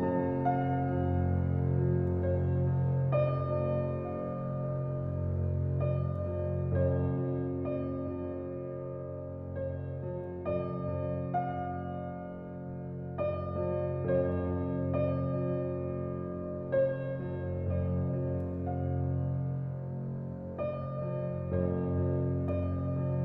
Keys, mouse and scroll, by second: 8.0-8.8 middle drag, 8.8-10.8 middle drag, 12.3 click, 13.5 s, 17.9 click, 18.7 alt+z, 19.6 z, 20.9 click, 21.9 alt+z.